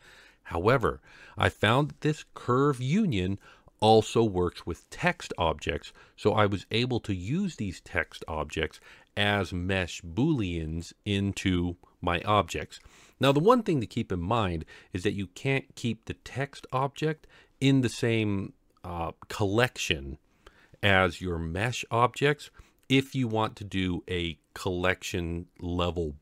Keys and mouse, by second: 6.7-7.3 middle drag.